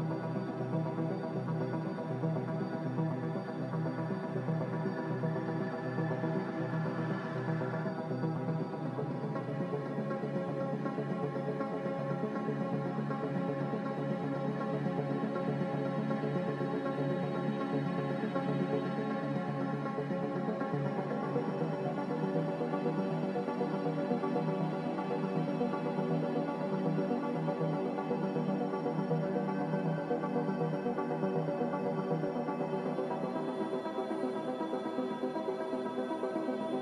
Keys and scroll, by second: 1.2 x, 2.7 typing, 3.2 Return, 9.8 x, 11.6 Escape, 14.8-15.5 typing, 17.8 z, 19.1 Delete, 21.1 ctrl+z, 30.1-31.7 typing, 33.2 2, 34.2 Tab, 36.2-36.8 typing.